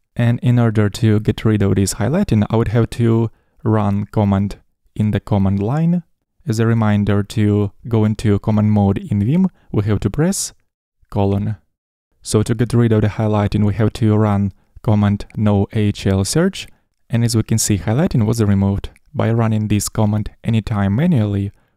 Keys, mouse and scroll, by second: 1.6 n, 2.7 shift+n, 3.0 shift+n, 10.9 shift+;.